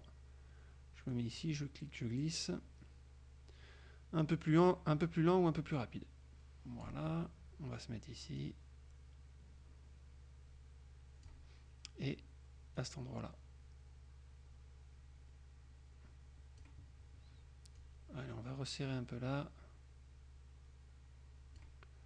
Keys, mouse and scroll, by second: 1.2-7.2 drag, 8.6-11.6 drag, 12.9-17.0 drag, 17.9-21.9 drag.